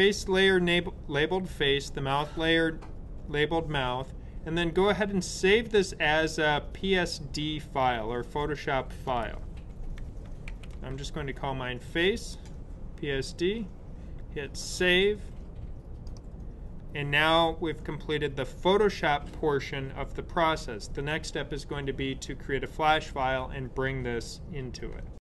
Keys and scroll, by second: 9.8-11.2 typing.